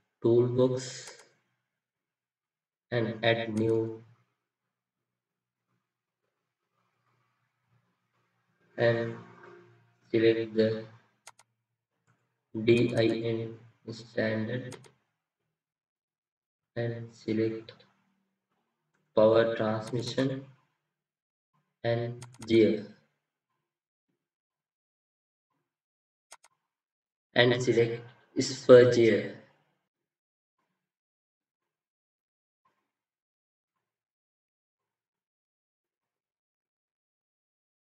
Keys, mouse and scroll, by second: 7.8-8.9 scroll down 1, 12.9 double click, 20.0 double click, 22.3 double click.